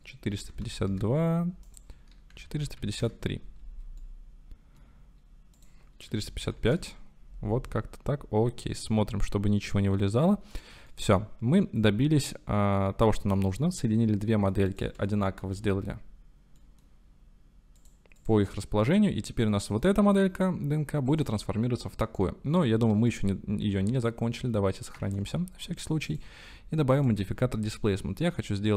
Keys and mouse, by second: 4.0 shift+middle click, 5.8-7.3 middle drag, 6.5 KP_5, 7.9-10.4 middle drag, 10.5 click, 11.0-12.3 drag, 13.1 shift+click, 13.6-14.5 drag, 15.1 shift+click, 15.3 shift+middle click, 16.6 middle click, 17.8 middle click, 18.2 middle click, 19.6 middle click, 21.1 click, 23.1-23.7 drag, 25.0 ctrl+s, 27.6-28.7 drag.